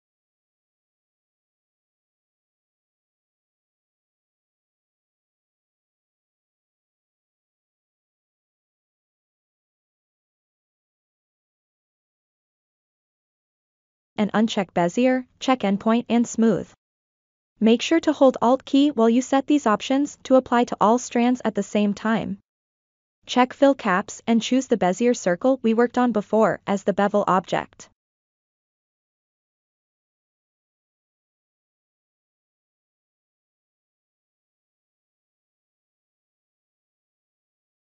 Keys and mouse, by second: 1.8 click, 5.0 click, 5.9 middle click, 6.7 a, 8.4 click, 10.7 click, 11.7-12.2 drag, 14.2 alt+click, 15.3 alt+click, 16.7 alt+click, 18.6 alt+click, 19.9 alt+click, 21.5 alt+click, 28.6 click, 29.8 ctrl+middle click, 30.4 middle click, 32.3 middle click, 36.0 middle click, 37.3 a.